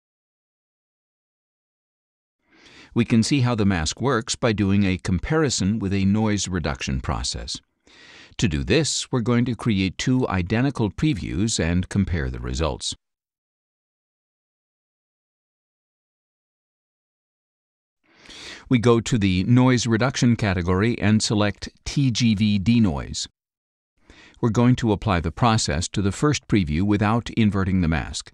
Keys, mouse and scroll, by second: 4.4 middle click, 5.9-7.3 drag, 8.4 click, 9.3-10.3 drag, 11.3-12.0 scroll down 4, 12.7 click, 13.2 scroll down 1, 13.9 scroll down 1, 15.8 click, 19.4 click, 21.9 click, 22.4 click, 26.9 click.